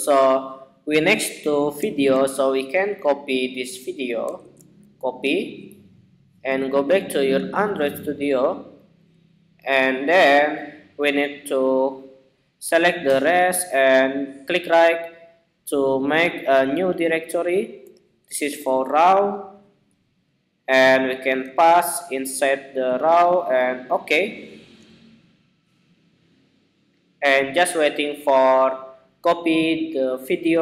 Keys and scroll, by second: 4.1 super+c, 21.8 super+v.